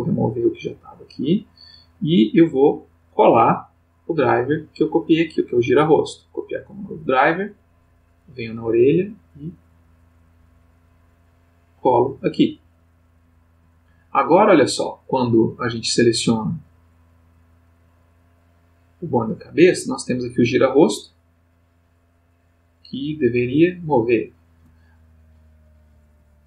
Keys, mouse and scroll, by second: 0.0 right click, 1.4 click, 3.9 click, 5.4 right click, 6.2 click, 8.1 click, 9.6 right click, 11.1 click, 18.2 click, 19.9-26.4 drag.